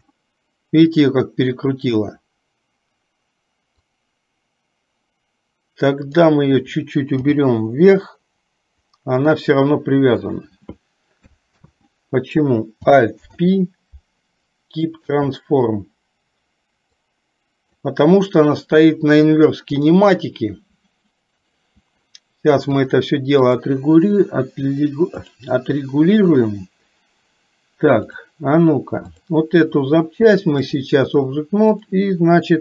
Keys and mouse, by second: 3.9-6.2 drag, 7.2 g, 11.6 ctrl+z, 13.2 alt+p, 17.1 click, 19.9 click, 23.0 click, 25.4 click, 28.1 click, 29.2 click, 30.7 click.